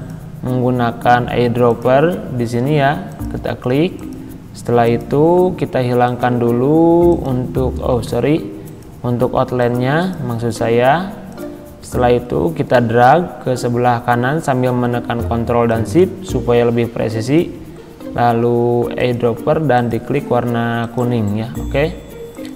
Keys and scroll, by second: 8.0 ctrl+z.